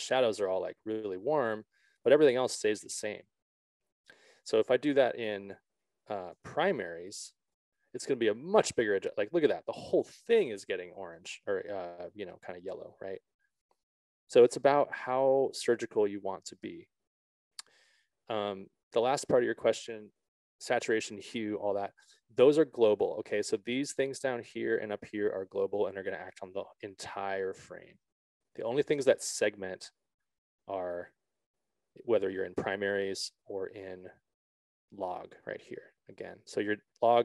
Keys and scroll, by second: 4.8 Return, 16.9 ctrl+z.